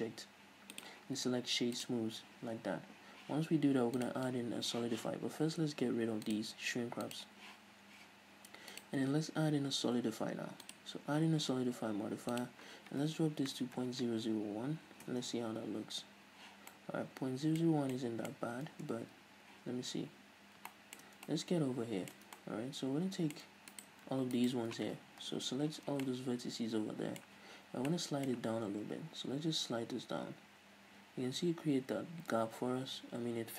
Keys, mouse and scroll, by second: 1.0-6.6 drag, 7.3 click, 9.0-16.9 drag, 14.3 KP_0, 15.4 Return, 16.9-24.0 middle drag, 18.9 Tab, 19.8 z, 20.3 a, 24.0 right click, 24.7 ctrl+right click, 25.5 KP_Decimal, 26.1 scroll down 1, 26.3-33.5 middle drag, 27.6 z, 27.9 scroll down 2, 29.1 g.